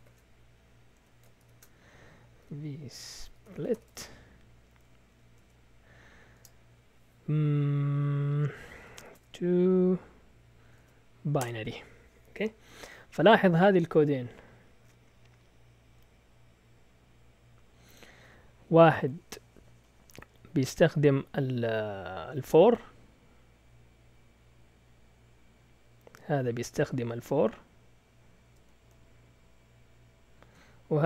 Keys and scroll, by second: 0.0-4.2 typing, 0.9 Escape, 5.3 Tab, 6.3 space, 8.7-9.4 typing, 10.6 Tab, 10.7 Tab, 11.4 Return.